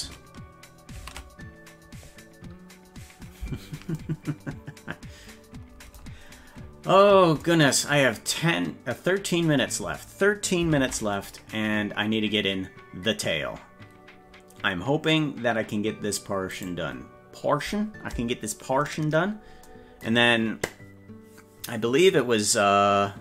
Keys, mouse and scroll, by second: 1.3 ctrl+s, 6.3-6.8 scroll down 2, 10.8 ctrl+Tab, 11.8-12.8 scroll down 6, 16.6 right click.